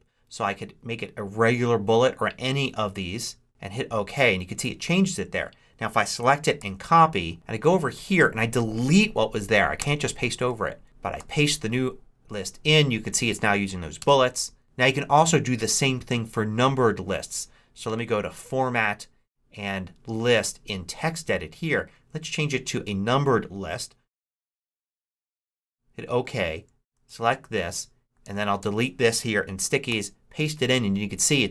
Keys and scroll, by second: 6.5 super+c, 9.7 BackSpace, 10.4 super+BackSpace, 11.1 super+v, 13.9 Return, 14.6 super+z, 27.0 super+c, 28.2 super+a, 28.5 super+BackSpace, 29.8 super+v.